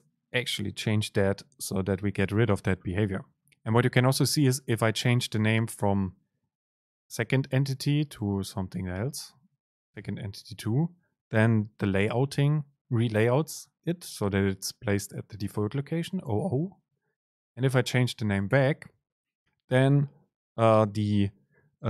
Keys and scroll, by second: 9.0 End, 18.6 Delete.